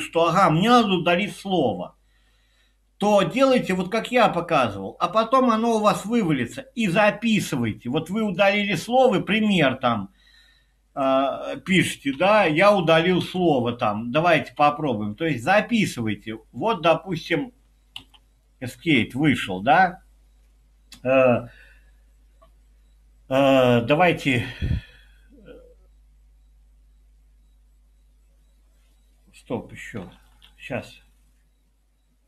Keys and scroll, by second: 12.2 i, 13.2 space, 14.4 typing, 18.0 Escape, 30.2 typing.